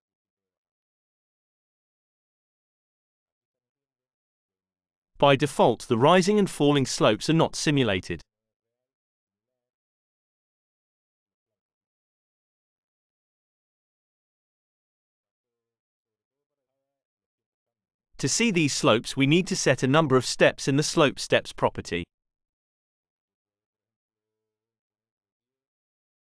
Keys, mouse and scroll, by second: 1.3 click, 9.7 click, 11.1-12.1 drag, 13.1 click, 14.0-16.6 drag, 22.4 click, 24.4 KP_1, 25.9 Return.